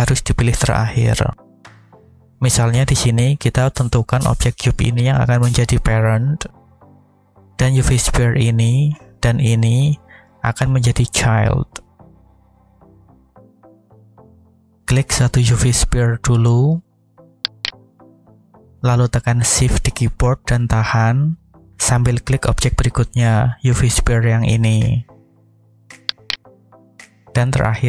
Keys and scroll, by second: 12.9 alt+a.